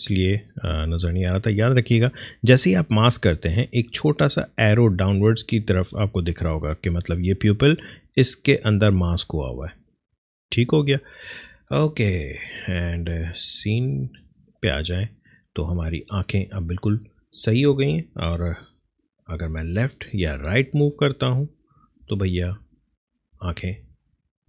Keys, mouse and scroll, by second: 13.3 click, 18.7 Left, 20.1 Right, 21.3 Left, 22.6 Up, 23.7 Down.